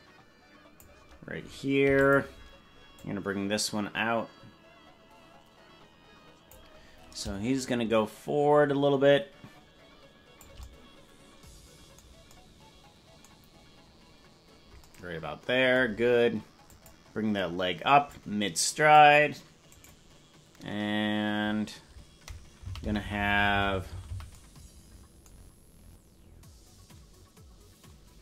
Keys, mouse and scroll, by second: 1.8 i, 3.0-6.6 drag, 7.6-10.4 shift+drag, 16.7 click, 18.1 click, 22.7 Right, 22.7 right click, 23.1-24.3 Right.